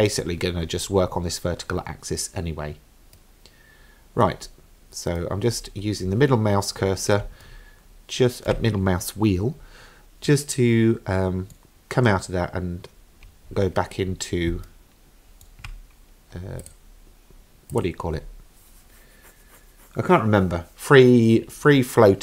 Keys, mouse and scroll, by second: 3.2-4.2 middle drag, 4.4-5.2 scroll down 2, 5.2 middle click, 6.1-7.2 scroll down 2, 7.5-8.5 shift+middle drag, 10.3-11.5 middle drag, 13.5-14.0 scroll up 2, 14.0-14.5 scroll down 1, 14.7-15.5 shift+middle drag, 16.6 click, 17.7 click.